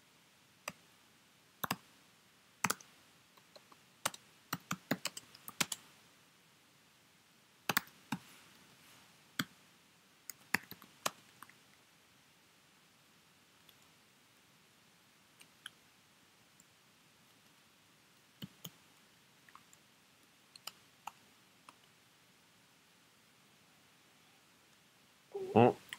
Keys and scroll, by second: 0.7-6.0 typing, 7.4-11.2 typing, 18.1-19.1 typing, 21.7 space.